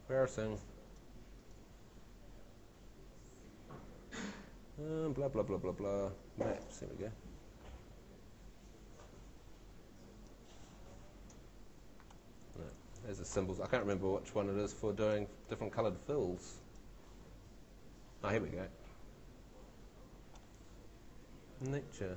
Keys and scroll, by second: 12.6 shift+super+z.